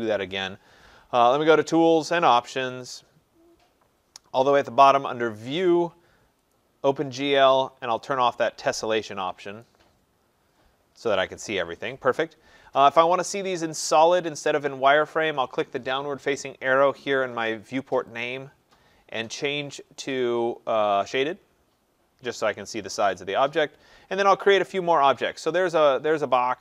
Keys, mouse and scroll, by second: 1.4 click, 2.9 click, 5.7 click, 6.6 click, 8.2 click, 9.7 click, 18.2 click, 21.3 click, 23.7 middle click, 23.8 middle click, 24.1 middle click, 24.2 middle click, 24.3 middle click.